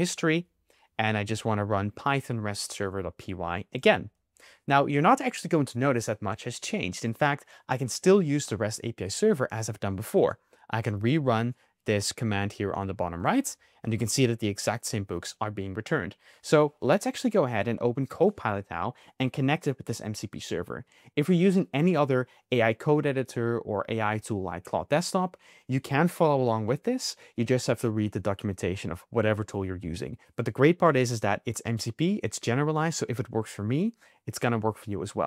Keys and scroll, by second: 0.0 Up, 12.7 Up.